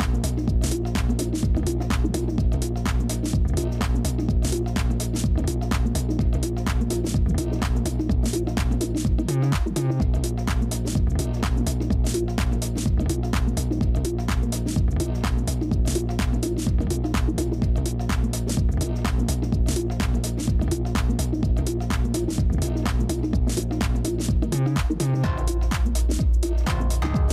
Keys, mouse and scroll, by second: 16.2 shift+click, 20.2 shift+click, 21.7 ctrl+z, 24.6 shift+click.